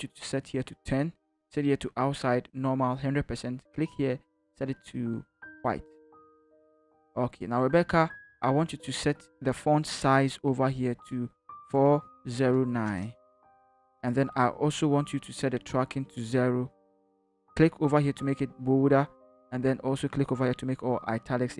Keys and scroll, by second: 11.4-12.9 typing.